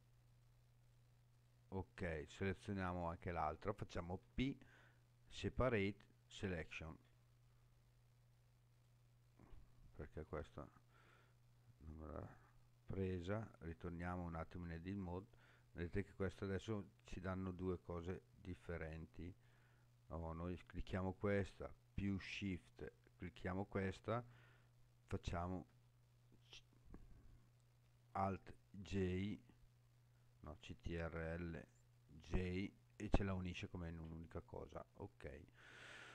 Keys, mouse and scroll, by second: 0.3 alt+shift+click, 0.9 alt+shift+click, 1.3 alt+shift+click, 4.3 p, 8.7 click, 10.3 p, 13.6 Tab, 15.1 click, 15.9 click, 17.0 click, 18.0 click, 19.4 click, 22.8 shift+click, 25.7 j, 29.0 alt+j, 32.0 ctrl+j.